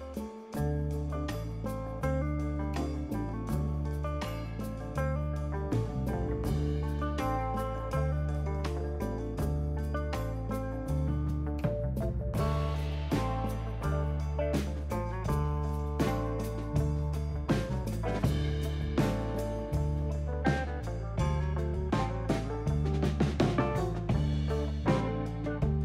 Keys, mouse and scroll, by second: 9.8 click, 23.1 click, 23.4 click, 24.8 click, 25.7 ctrl+z.